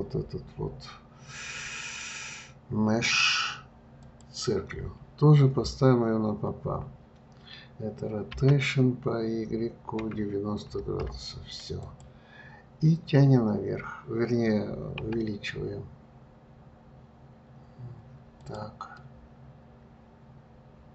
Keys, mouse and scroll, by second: 8.7 r, 15.4 s, 19.3-20.9 middle drag.